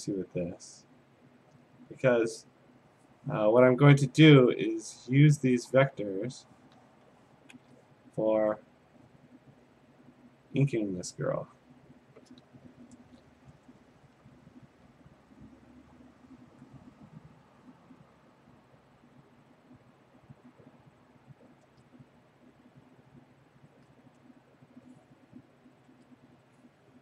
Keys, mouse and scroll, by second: 2.2 click, 6.4 click, 7.6 ctrl+z, 9.0 click, 10.6 click, 11.6 click, 14.7 ctrl+z, 16.5 click, 18.0 click, 19.6 click, 21.6 ctrl+z, 23.7 click, 25.4 click, 25.9 ctrl+z.